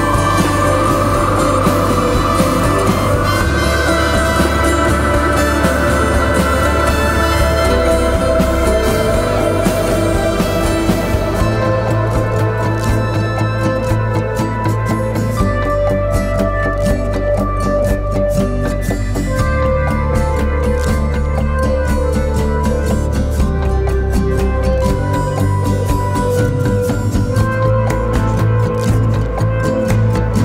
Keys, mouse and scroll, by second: 13.5 typing.